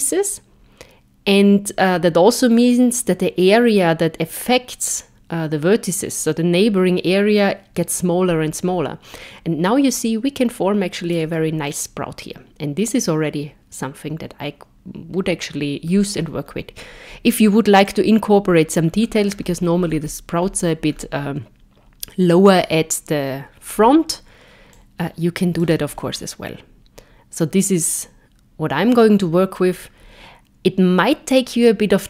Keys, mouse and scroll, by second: 11.7 middle click, 16.3-17.8 scroll up 2, 17.8 click, 24.7 click, 26.0 middle click.